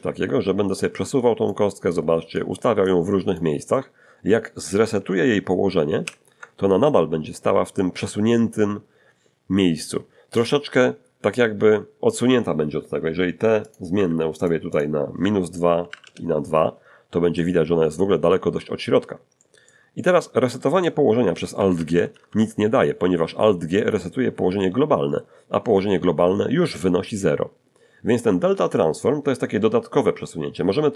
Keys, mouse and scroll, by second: 0.8 click, 1.9 click, 2.9 click, 6.0 alt+g, 6.8 alt+middle click, 6.9-7.9 alt+drag, 13.6 click, 13.9 2, 14.4 click, 14.7 click, 15.8 -, 15.9 2, 16.0 Return, 17.3 click, 19.3 shift+click, 19.9-21.0 shift+drag, 21.3 alt+g, 21.5 alt+g, 21.7 alt+g.